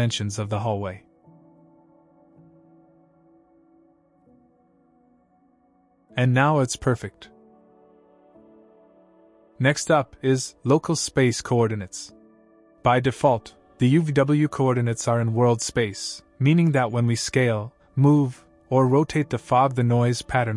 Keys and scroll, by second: 1.4-2.9 typing, 4.4-6.1 typing, 7.2 a.